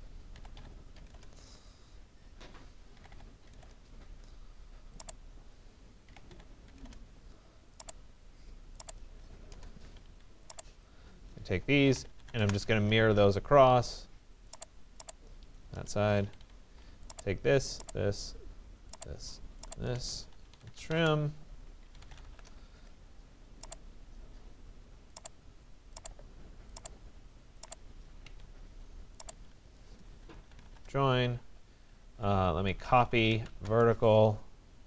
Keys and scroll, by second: 0.1-1.1 typing, 1.1 Return, 2.7-3.6 typing, 5.9-6.8 typing, 10.1 Escape, 12.4 Return, 16.2 Escape, 20.5 Return, 27.9 Escape, 30.7 Return.